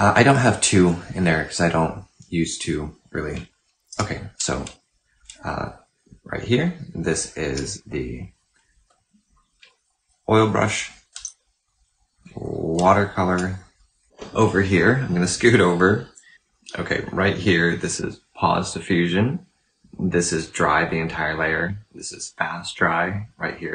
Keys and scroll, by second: 3.7 이, 7.3 이, 10.9 w.